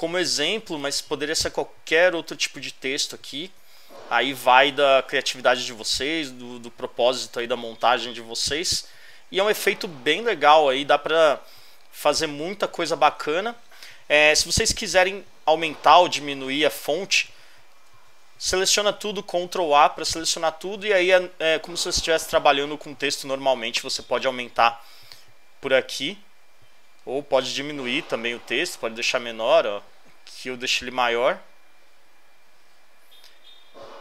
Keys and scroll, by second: 0.6 super+space, 1.1 super+v, 1.9 super+space, 2.3 super+v, 3.1 super+space, 3.5 super+v, 4.4 super+space, 4.7 super+space, 4.9 super+v, 5.9 super+space, 6.2 super+space, 6.3 super+v, 7.2 super+space, 7.6 super+v, 8.5 super+space, 8.8 super+space, 8.9 super+v, 9.8 super+space, 10.2 super+space, 10.3 super+v, 11.3 super+space, 11.6 super+space, 11.7 super+v, 17.7 super+a.